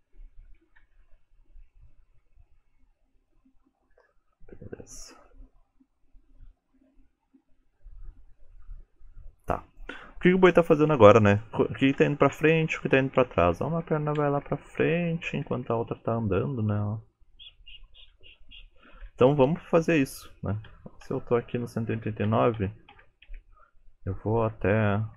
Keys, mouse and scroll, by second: 2.9 click, 12.0 Right, 12.4 Right, 12.7 Right, 13.0 Right, 13.3 Right, 13.5 Right, 13.8 Right, 14.0 Right, 14.2 Right, 14.5 Right, 14.7 Right, 14.9 Right, 15.1 Right, 15.3 Right, 15.5 Right, 15.7 Right, 16.1 Left, 16.3 Left, 16.5 Left, 16.7 Left, 16.8 Left, 17.0 Left, 17.2 Left, 17.4 Left, 17.6 Left, 17.8 Left, 18.0 Left, 18.2 Left, 18.4 Left, 18.6 Left, 18.9 Left, 19.1 Left, 19.3 Left, 19.5 Left, 20.8 Right, 21.1 Right, 22.0 Right, 22.3 Right, 22.6 Right, 23.0 Right, 23.3 Right, 24.6 Right.